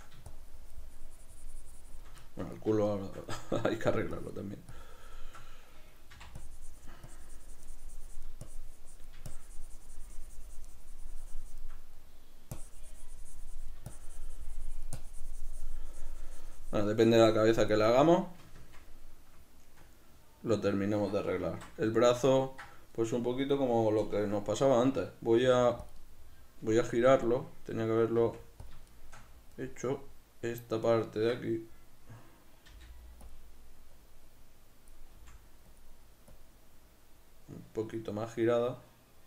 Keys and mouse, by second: 0.4-2.6 shift+drag, 2.6-4.2 middle drag, 4.2-12.0 drag, 6.2 c, 12.0 middle click, 12.6-18.0 drag, 18.0-24.1 middle drag, 21.6 alt+q, 24.1-26.0 drag, 25.5 f, 26.0-28.7 middle drag, 28.2 f, 28.7 click, 28.9-33.4 shift+middle drag, 32.7 f, 33.4 click, 34.1-35.9 drag, 35.2 f, 36.5-39.2 drag.